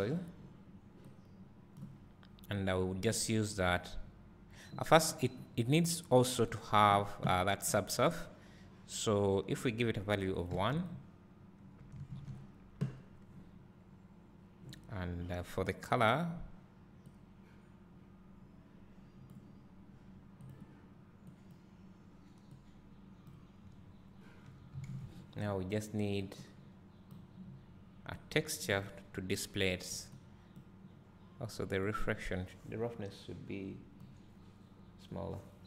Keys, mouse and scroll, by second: 1.1 click, 2.6 click, 10.9 click, 28.6-35.6 drag.